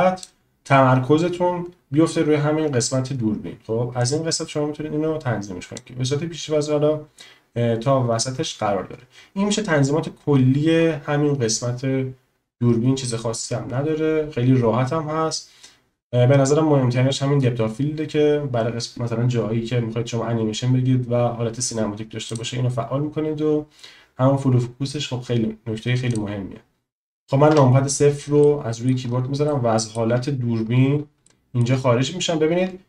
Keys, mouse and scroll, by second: 4.0-5.9 middle drag, 22.4 click, 26.2 click, 27.5 KP_0, 28.4 click, 28.5 middle click, 29.4 shift+middle click, 31.2 shift+middle click.